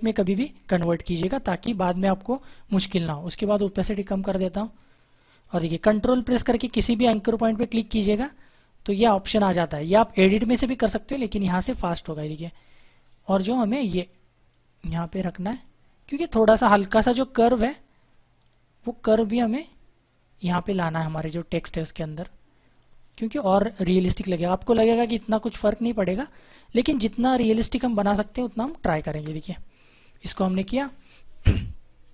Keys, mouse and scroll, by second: 0.2 click, 3.6 click, 7.6 ctrl+click, 10.7 right click, 12.6 click, 18.3 right click, 19.5 click, 29.1 Return.